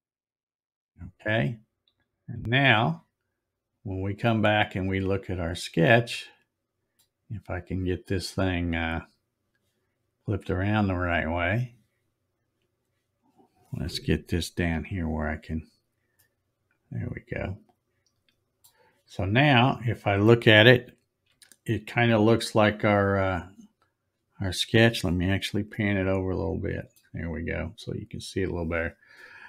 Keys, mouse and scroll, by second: 2.7 click, 3.2-3.5 scroll up 2, 4.3 scroll up 1, 4.5-4.9 scroll down 1, 10.2 click, 11.5 click, 14.8 z, 16.2-18.6 middle drag, 19.6 scroll up 2, 21.4 z, 22.5 click, 25.8-27.0 shift+middle drag, 27.3 scroll up 2, 27.6 scroll down 1, 27.8-28.1 scroll up 5.